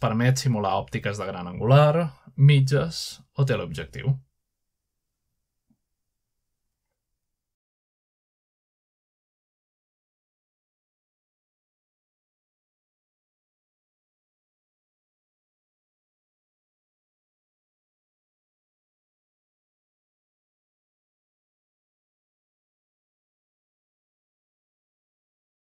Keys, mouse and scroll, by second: 0.6 2, 0.8 1, 1.0 0, 1.5 Return, 2.6-3.6 drag, 3.4-4.1 typing, 4.3 Return, 5.3-7.6 typing, 6.4-7.9 scroll up 1, 7.9 click, 8.8-9.1 typing, 10.9-15.5 drag, 11.8-12.6 typing, 16.2 shift+middle click, 16.3 typing, 16.9-17.5 middle drag, 17.1 scroll down 1, 17.4 shift+scroll up 1, 17.5 shift+middle click, 17.7 typing, 18.1 shift+middle click, 18.4-19.3 scroll up 2, 19.0 shift+middle click, 19.0-19.9 typing, 19.8-22.4 drag, 23.5-24.5 scroll down 2.